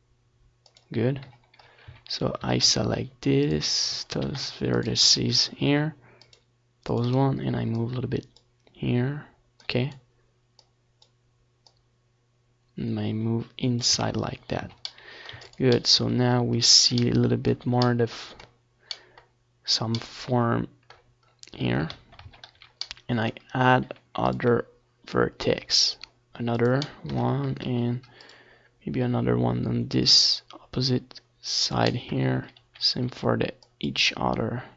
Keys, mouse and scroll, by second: 3.5 z, 3.7-5.8 middle drag, 4.1 Tab, 4.7 ctrl+s, 7.5-9.9 middle drag, 9.9 scroll up 1, 10.1 middle click, 10.3 Tab, 10.6 a, 11.7 ctrl+r, 14.3-15.8 drag, 14.5 middle click, 14.7 a, 15.1 ctrl+r, 19.0-20.5 drag, 19.1-23.0 middle drag, 19.8 ctrl+r, 23.8-25.2 drag, 24.0 middle click, 24.3 a, 24.8 ctrl+r, 27.5-29.4 drag, 29.4 ctrl+z, 30.0 ctrl+r, 33.1-34.5 drag, 33.9 ctrl+z, 34.3 ctrl+r, 34.5 middle click.